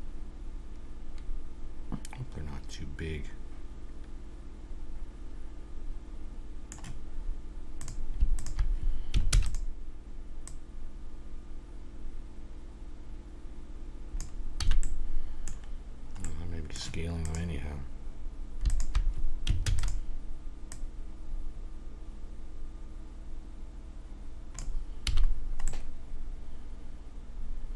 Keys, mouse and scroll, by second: 7.8-10.2 drag, 9.3 shift+d, 10.4-12.2 drag, 14.6 a, 14.8 click, 15.3-16.8 middle drag, 17.2-20.4 drag, 19.6 shift+d, 20.7-22.5 drag, 25.1 a, 25.2 middle click, 26.3 middle click, 27.5-27.7 middle drag.